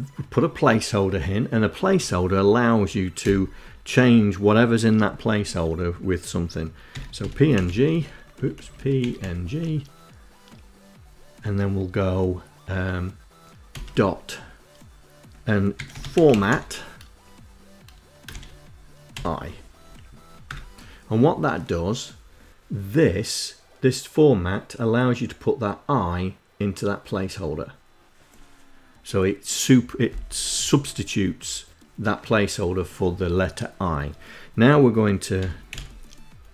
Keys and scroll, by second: 6.2-7.4 typing, 7.6 Left, 7.9 Left, 8.2 Delete, 8.5 End, 13.0 ., 14.8-16.2 typing, 17.5 shift+9, 18.4 i, 19.0 Down, 19.7 Return, 34.6 i, 34.9 m, 36.1 BackSpace, 36.4 a.